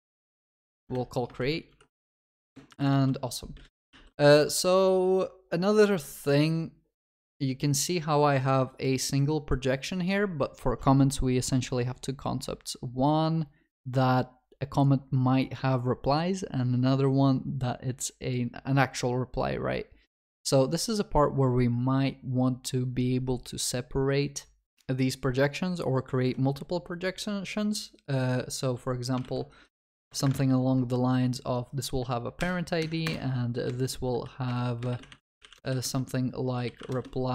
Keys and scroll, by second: 2.9 ctrl+s, 3.6 ctrl+alt+shift+l, 6.3 ctrl+b, 29.3 ctrl+c, 32.4 ctrl+v, 32.4 ctrl+y.